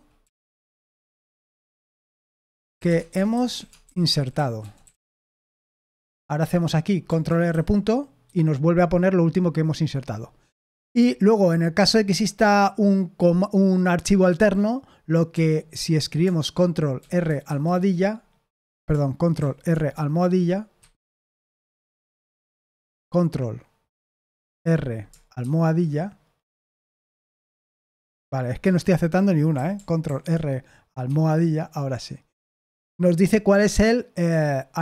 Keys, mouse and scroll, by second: 0.0-5.9 typing, 7.2 ctrl+r, 7.5 ., 8.2 Escape, 15.3 o, 16.9 ctrl+r, 17.4 shift+`, 19.3 ctrl+e, 20.7 Escape, 21.4 i, 22.5 Delete, 24.2 ctrl+r, 28.6 Escape, 29.5 i, 30.0 ctrl+r, 34.2 Escape.